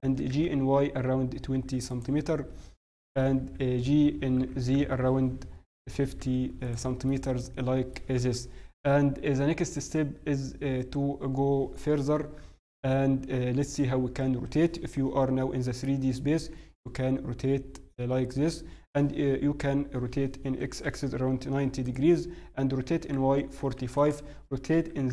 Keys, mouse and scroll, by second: 0.0 g, 2.3-3.0 scroll up 1, 3.3 KP_1, 4.3-5.4 scroll up 2, 4.3 g, 7.0 middle click, 8.2 KP_1, 11.2 n, 12.2 KP_1, 12.7 KP_1, 14.9 middle click, 15.8 n, 16.3 r, 22.6 r.